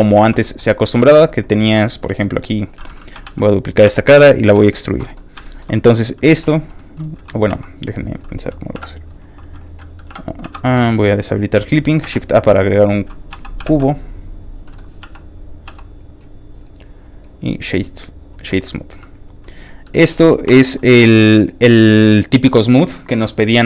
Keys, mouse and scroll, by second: 0.2 shift+Tab, 0.4 middle click, 1.0 2, 1.2 click, 1.8 click, 2.0 middle click, 3.2 shift+d, 3.5 shift+click, 3.8 e, 4.7 shift+click, 4.9 shift+middle click, 5.2 scroll up 1, 5.4 shift+middle click, 5.7 shift+middle click, 7.5 shift+x, 8.8 click, 8.8 l, 9.9-12.0 typing, 10.5 click, 11.4 click, 11.7 middle click, 12.7 click, 13.3 x, 13.4 click, 14.2 click, 14.6 middle click, 15.0 s, 15.5 click, 15.9 click, 16.2-18.2 right drag, 18.2 click, 18.5 middle click, 19.6 click, 19.9 middle click, 20.4 o, 20.9 middle click, 21.1 shift+middle click, 21.6 middle click.